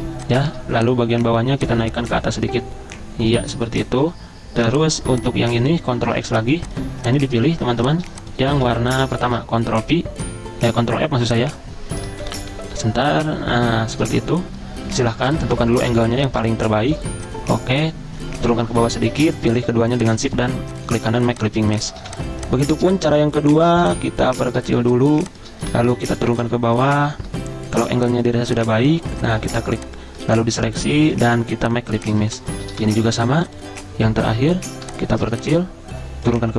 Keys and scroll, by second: 0.6 a, 4.1 c, 4.8 v, 6.1 ctrl+x, 7.6 ctrl+z, 8.7 v, 9.4 ctrl+f, 12.3 ctrl+[, 12.5 ctrl+[, 13.9 ctrl+], 14.4 ctrl+], 18.8 ctrl+[, 21.3 z, 22.1 v, 24.9 z, 25.7 v, 26.2 ctrl+[, 26.3 ctrl+[, 30.4 ctrl+z, 32.0-32.8 typing.